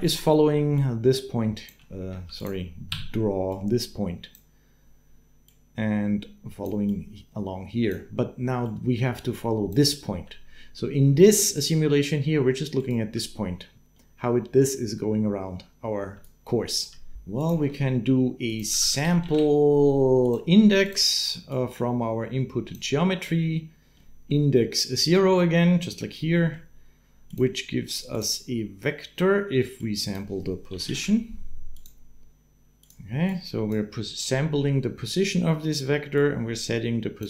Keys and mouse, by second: 0.3 f, 0.7 click, 1.5-9.9 typing, 3.3 click, 3.5 right click, 6.6-7.7 right drag, 8.6 click, 11.3-13.7 typing, 16.0 click, 16.6 d, 16.9 d, 17.2 click, 17.5 shift+a, 20.5-22.5 drag, 24.0 middle click, 26.1 middle click, 27.1 click, 29.6-32.7 drag, 33.1 click, 36.0-37.0 drag.